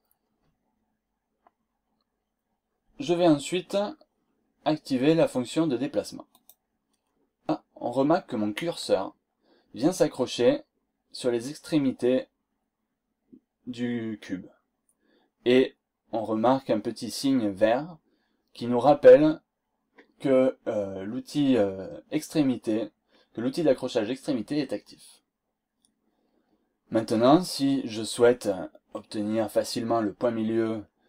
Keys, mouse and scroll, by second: 6.4 click.